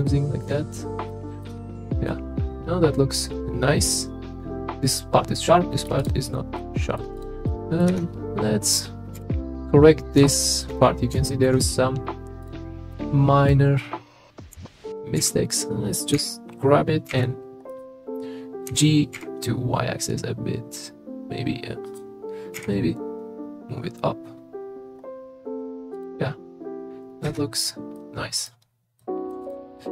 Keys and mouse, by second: 0.1 shift+middle click, 1.1 middle click, 1.5 Tab, 2.1-5.8 middle drag, 6.6-7.0 middle drag, 7.2 click, 7.5-7.8 middle drag, 7.9 Tab, 9.1 KP_3, 10.3 shift+middle click, 10.7 middle click, 11.2 shift+middle click, 14.5 g, 15.2 x, 16.2 g, 17.1 y, 18.7 g, 19.1 y, 22.6 g, 25.9 click, 27.3 Tab, 27.9-28.4 middle drag, 29.0 middle drag.